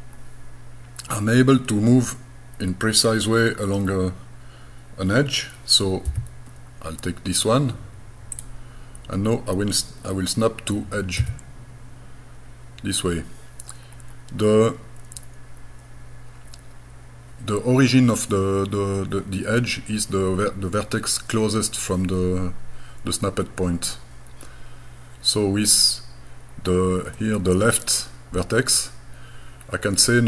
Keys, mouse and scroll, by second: 0.1-0.7 scroll up 1, 6.1 g, 8.3 click, 11.2 e, 13.9-14.2 scroll up 3, 27.2 middle click.